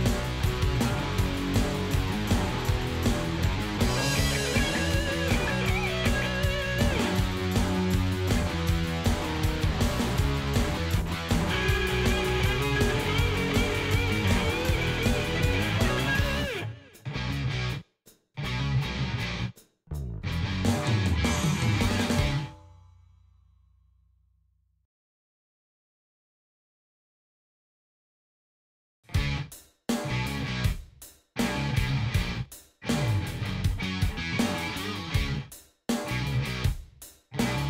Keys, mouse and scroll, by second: 3.5-6.5 drag, 8.1 click, 10.3-15.9 drag, 16.9 click, 18.4-19.9 drag, 20.9 click, 22.5-27.1 drag, 28.0 click, 29.0-30.3 drag, 31.6 click, 32.8 click, 34.1 click, 34.7 click, 35.8 click.